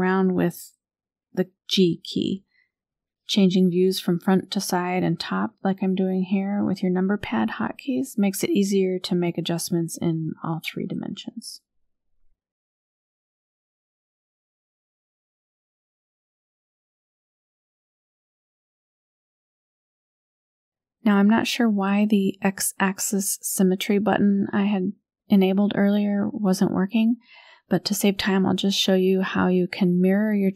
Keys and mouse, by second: 0.4 g, 2.9 e, 5.0 KP_3, 6.4 g, 8.5 KP_1, 9.5 shift+middle click, 10.4 e, 12.9 KP_3, 14.2 g, 16.0 KP_7, 17.7 r, 20.5 middle click, 23.7 a, 24.8 click, 25.4 click, 26.2 click, 28.3 a, 29.4 KP_1.